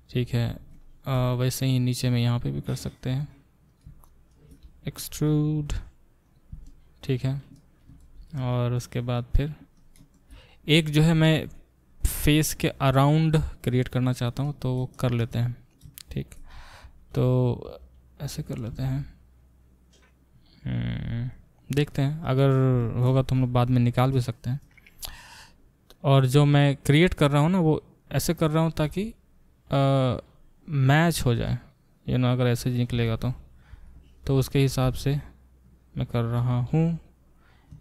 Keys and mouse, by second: 2.2 shift+click, 2.3 shift+middle click, 2.7 shift+click, 2.8 shift+middle click, 3.2 click, 3.8 shift+middle click, 4.0 shift+click, 4.1 shift+middle click, 4.3 shift+click, 4.4-15.7 shift+middle drag, 5.0 e, 6.3 click, 15.7 click, 15.8 shift+middle click, 16.1 shift+click, 16.2-21.3 shift+middle drag, 16.8 e, 17.6 e, 21.3-24.2 drag, 24.2 shift+middle click, 24.4 shift+click, 24.5-28.5 shift+middle drag, 25.1 e, 28.5 click, 28.6-30.8 middle drag, 28.9 f, 30.8-34.2 drag, 33.7 middle click, 34.2-37.8 shift+middle drag, 34.8 e, 36.4 e.